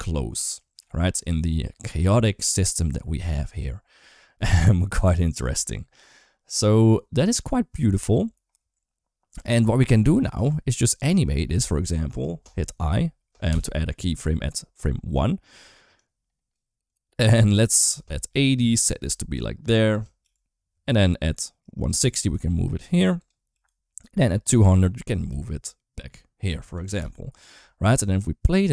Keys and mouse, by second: 9.2 space, 10.2 click, 11.4 g, 13.3 i, 15.8 click, 16.7-18.1 drag, 18.8 g, 20.0 i, 21.4 click, 22.0-23.0 typing, 24.3 click, 26.3 g, 26.8 i, 27.8 click.